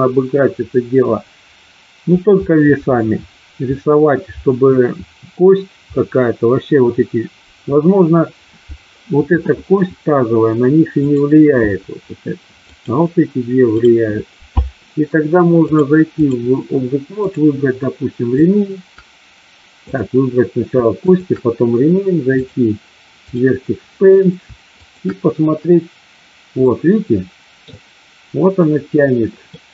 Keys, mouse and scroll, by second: 10.9 click, 12.7-13.1 drag, 15.7 click, 17.1 click, 19.7 click, 21.0 shift+click, 22.5-23.5 drag, 24.7-25.7 shift+drag, 26.6-27.6 middle drag, 29.6-29.7 middle drag.